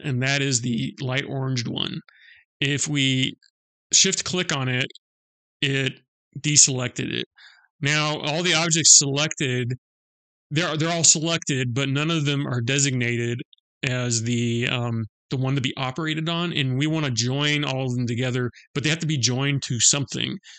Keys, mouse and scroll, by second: 3.8 shift+click, 7.1 middle click.